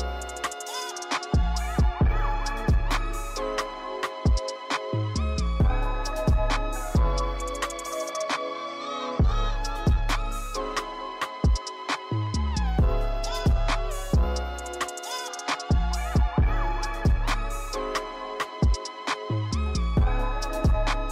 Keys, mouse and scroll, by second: 0.7 click, 1.0 scroll down 2, 1.3-2.0 drag, 5.2 click, 8.4 click, 9.0 click, 9.7-10.7 drag.